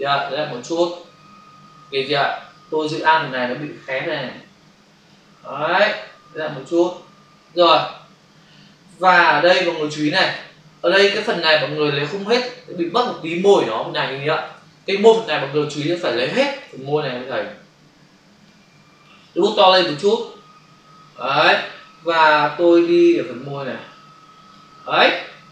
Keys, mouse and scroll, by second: 0.0 click, 3.8 alt+click, 6.4 click, 8.2 space, 16.0 space, 16.9 ctrl+click, 19.9-20.6 typing, 22.4 click.